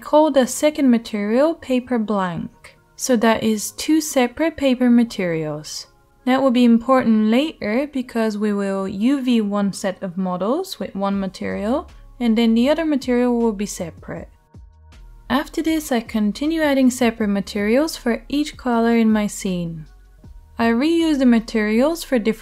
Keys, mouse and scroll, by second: 0.3 right click, 1.0 middle click, 1.3 right click, 2.8 click, 3.9 l, 5.0-6.6 drag, 7.2-8.5 middle drag, 7.2 e, 7.3 BackSpace, 7.9 e, 8.5-9.8 right drag, 9.8 middle click, 10.5 right click, 10.9-12.4 middle drag, 12.4 right click, 13.5 middle click, 13.9 Tab, 14.1 shift+right click, 14.3 shift+middle click, 14.4 right click, 14.6 middle click, 14.9 right click, 15.2 middle click, 15.9 right click, 16.4-17.5 shift+middle drag, 17.5 scroll, 17.7-20.1 middle drag, 19.8 Tab, 20.1 click, 20.2 Tab, 20.9-22.1 shift+middle drag, 22.1-22.4 scroll up 1.